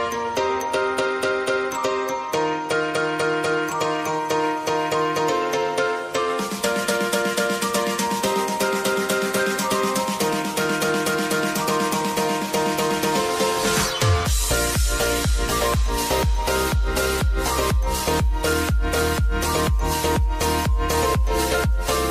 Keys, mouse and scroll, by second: 0.0 space, 0.6 click, 1.0 u, 1.8 click, 2.9 F9, 3.7 click, 4.2 space, 4.8 click, 4.8 click, 15.5 space, 16.1 n, 16.3 space.